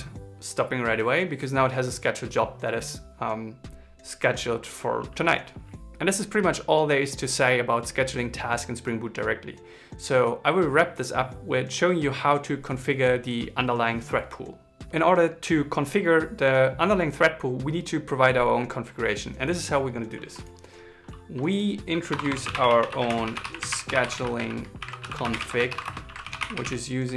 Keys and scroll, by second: 22.8 shift+s, 24.5 shift+c, 25.4 shift+., 25.8 shift+s.